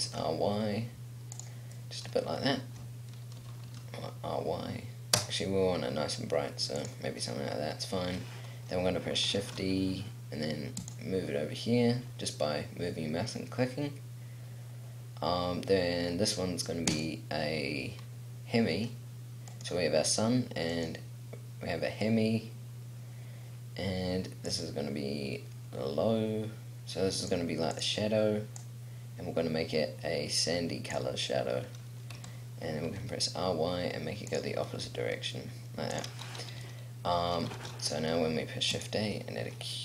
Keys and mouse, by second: 1.1 middle click, 2.0 click, 3.5 r, 9.6 shift+d, 11.1-13.0 drag, 17.1-19.0 drag, 19.0-22.7 middle drag, 24.6-32.3 drag, 32.3 r, 34.6 click, 35.0 g, 35.2 click, 37.7 shift+a.